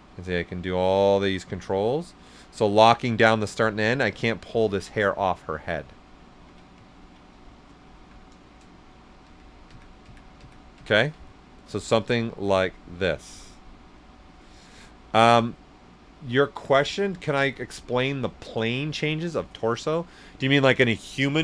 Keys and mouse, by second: 6.2 ctrl+z, 6.8 ctrl+right click, 7.2 right click, 8.2 right click, 8.8 ctrl+z, 11.2 right click, 12.2 click, 13.2 right click, 13.9-19.3 drag.